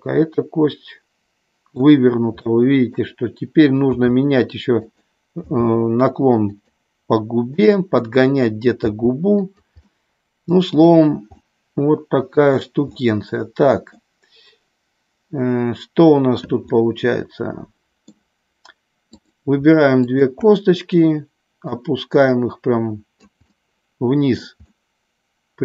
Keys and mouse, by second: 2.5 middle click, 3.9 r, 4.8 click, 5.4 g, 6.4 click, 7.5 click, 8.8 g, 9.4 click, 9.8-10.8 middle drag, 11.4-12.5 middle drag, 12.9 middle click, 16.7-18.1 middle drag, 19.0 click, 20.1 shift+click, 21.6-23.2 drag, 23.5-24.5 middle drag, 24.6-25.6 middle drag.